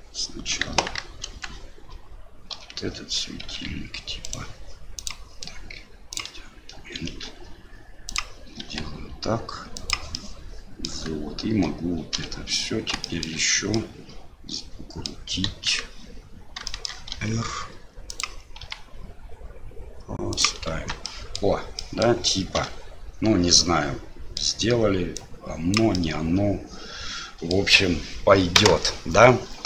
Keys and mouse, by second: 0.7 KP_1, 1.2 KP_3, 2.5 l, 3.5 r, 5.0-6.2 drag, 7.0 r, 8.7 g, 10.3 middle click, 12.2 l, 13.1 shift+click, 13.8-15.1 drag, 15.5 KP_1, 16.8 shift+click, 17.1 r, 18.6 g, 20.7 Tab, 21.0 middle drag, 21.3 click, 21.8 middle drag, 22.6 KP_Divide, 23.6-24.0 middle drag, 24.0 click, 24.1 middle click, 24.1 click, 24.3 middle click, 25.2 click, 26.1-27.5 middle drag.